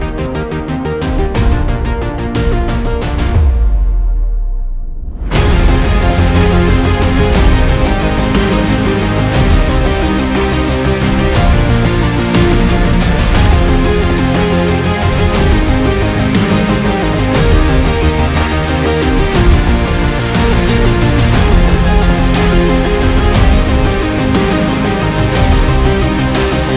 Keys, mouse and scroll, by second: 0.1-0.6 alt+scroll up 6, 0.3 ctrl+z, 0.4 ctrl+z, 0.6 alt+scroll down 1, 0.9-1.6 alt+scroll up 12, 1.8 space, 2.8 space, 3.4 space, 3.9 space, 4.0 ctrl+z, 4.0 alt+scroll down 5, 4.9-5.2 alt+scroll up 1, 5.4-5.9 alt+scroll down 2, 5.5 space, 6.3 space, 6.5-6.9 alt+scroll up 1, 8.0 right click, 9.6 ctrl+j, 20.4 right click, 21.2 right click, 22.8 alt+scroll down 1, 22.8 alt+scroll up 1, 23.5 ctrl+t, 25.4 alt+scroll down 1, 25.5 alt+scroll up 1, 25.6 alt+scroll down 1.